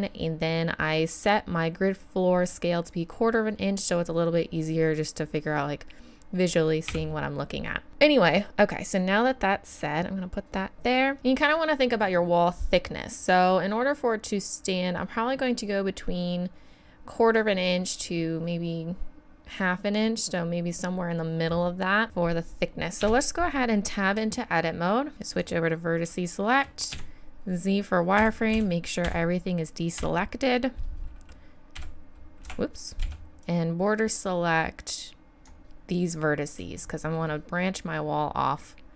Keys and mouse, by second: 5.6 middle click, 6.9 KP_7, 7.8-9.0 middle drag, 10.9-20.8 middle drag, 23.0 Tab, 25.3-26.9 drag, 26.3 middle click, 26.9 z, 28.2 a, 28.5 a, 29.0 a, 30.0 n, 31.8 n, 32.4 n, 32.5 m, 33.0 b, 36.8-38.9 middle drag.